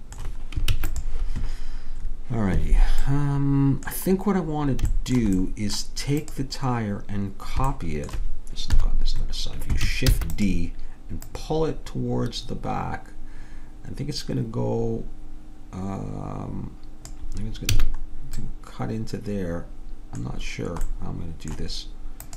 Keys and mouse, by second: 0.8 ctrl+s, 6.3-8.8 drag, 8.8 KP_3, 10.1 shift+d, 11.3-13.1 drag, 17.8 a, 18.4-20.2 middle drag, 21.0 right click.